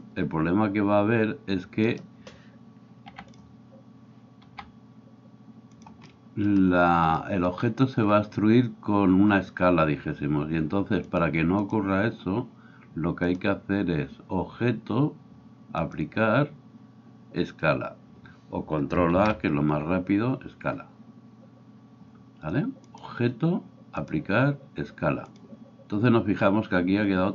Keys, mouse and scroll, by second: 1.9-3.1 middle drag, 1.9-3.1 right drag, 3.1 e, 3.5-11.2 middle drag, 4.6 s, 11.2-27.3 drag, 19.2 ctrl+a.